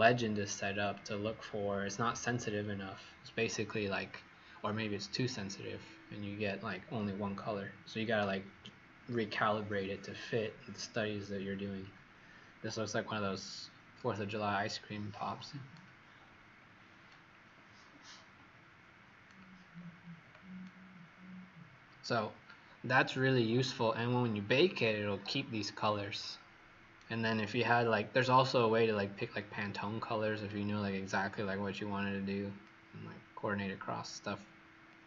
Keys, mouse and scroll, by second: 16.1-16.8 scroll up 3, 17.0 right click, 19.7-20.1 scroll down 2, 20.6 right click, 22.6 scroll down 1, 24.5 right click, 29.3 click.